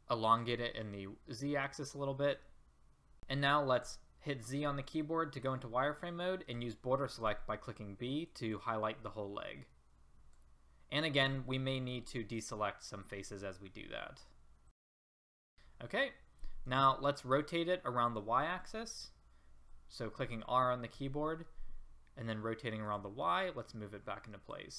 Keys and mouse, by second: 2.7-3.7 middle drag, 3.7 z, 6.5 b, 11.8 z, 15.2 middle click, 16.0 middle click, 17.0-19.6 middle drag, 19.6 r, 23.6-24.7 drag.